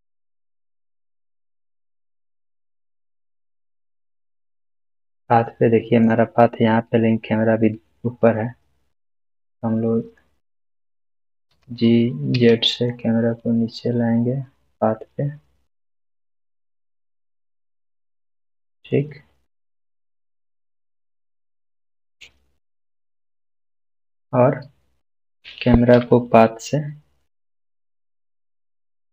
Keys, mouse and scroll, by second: 1.9 click, 2.0-3.5 middle click, 3.5-4.3 scroll down 1, 4.3-6.1 middle drag, 7.1 scroll down 1, 11.5 g, 18.2 z, 18.3 click, 18.7 scroll up 1, 19.4-24.1 middle drag, 27.2 shift+click.